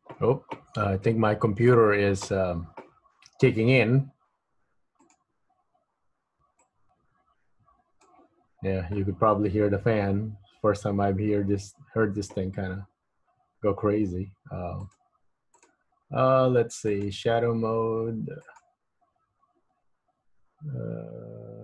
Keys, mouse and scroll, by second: 1.2 middle click, 5.1 click, 10.5-11.1 scroll up 3, 11.1-12.5 scroll down 10, 13.4-14.9 scroll down 10, 14.9 click, 17.1 click.